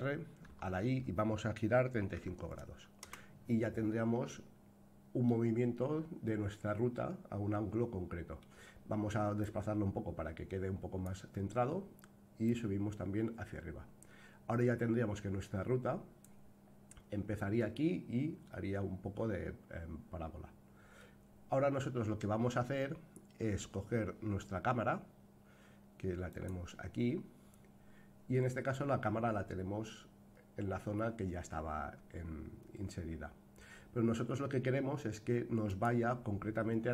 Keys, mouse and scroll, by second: 4.3-5.3 middle drag, 6.2-8.4 middle drag, 9.4-11.1 drag, 12.4-16.2 drag, 18.5-21.0 middle drag, 24.8-25.4 scroll down 2, 26.3 click, 26.3 scroll down 1, 27.7-28.6 scroll down 3, 35.6 click.